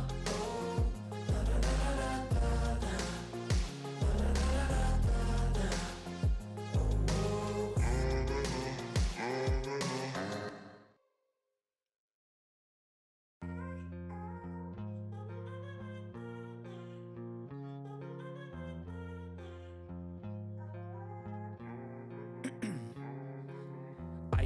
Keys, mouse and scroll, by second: 0.0-1.7 typing, 2.1 ctrl+s, 3.5 3, 3.9 ctrl+s, 8.7 click, 9.6 click, 10.1 scroll down 1, 11.6 scroll up 1, 15.5-17.3 typing, 21.0-22.7 typing, 23.9 click, 24.1 ctrl+s.